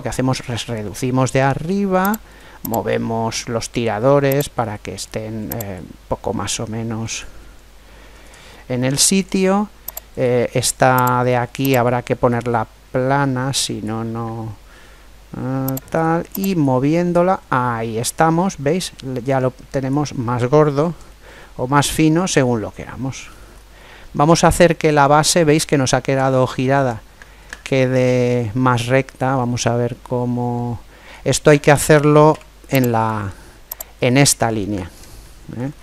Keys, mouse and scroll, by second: 2.0 right click, 2.7-4.4 drag, 5.5 click, 8.3-9.9 middle drag, 9.9-12.9 right drag, 11.6-13.4 drag, 15.7 right click, 16.5-18.1 drag, 20.9-28.6 middle drag, 23.8-24.5 scroll up 1, 28.0-28.6 scroll down 1, 28.6-29.3 scroll down 1, 32.1 Tab, 33.7 right click, 35.0-35.8 middle drag.